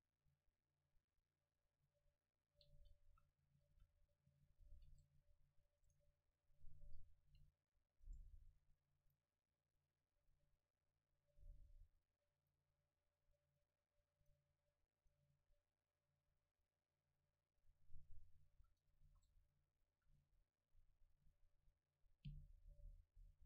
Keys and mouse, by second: 1.7 click, 1.9 r, 3.1 a, 3.6 a, 3.8 a, 4.7 ctrl+s, 5.9-7.6 right drag, 7.3 a, 8.1 right click, 9.9-14.5 drag, 15.0-18.0 drag, 18.6 a, 19.1 ctrl+s, 20.2 F12, 22.7-23.4 middle drag.